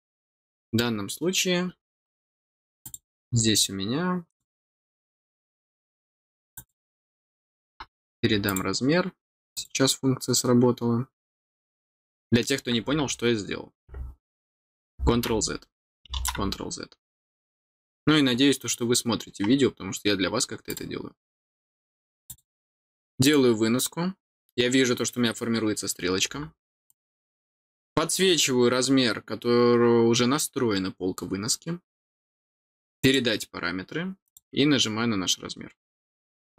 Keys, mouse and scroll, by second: 0.4 middle click, 2.8 click, 4.2 click, 6.5 click, 8.4 click, 9.5 click, 20.2 middle click, 20.2 scroll down 1, 20.6 click, 22.2 click, 23.2 click, 26.8 click, 33.0 click, 34.2 click, 35.8 click.